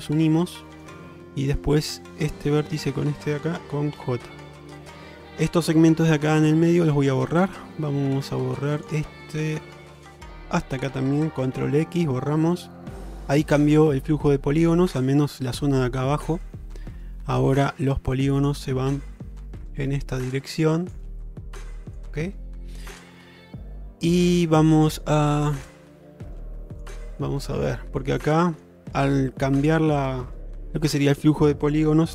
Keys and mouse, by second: 0.3 middle click, 4.0 j, 4.5 middle click, 5.5 2, 6.1 click, 6.8 shift+click, 9.3 middle click, 11.6 ctrl+x, 12.0-13.1 middle drag, 14.2 middle click, 16.1 middle click, 27.2 middle click, 27.9 shift+middle click, 28.4 middle click, 29.4 middle click, 30.6 1.